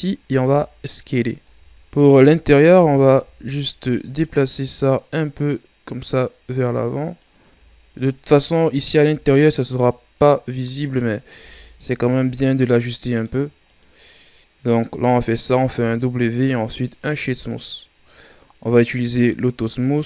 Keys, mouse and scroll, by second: 0.3 s, 1.5 z, 2.5 alt+right click, 3.2 z, 3.5-4.6 middle drag, 4.6-7.6 drag, 7.9-9.8 alt+right drag, 9.8-11.3 drag, 11.3 Tab, 11.8 scroll down 2, 12.1-13.6 middle drag, 13.6-15.2 right drag, 15.2-15.6 scroll up 1, 15.6 w, 18.9-19.8 scroll down 1, 19.8-20.0 scroll down 9.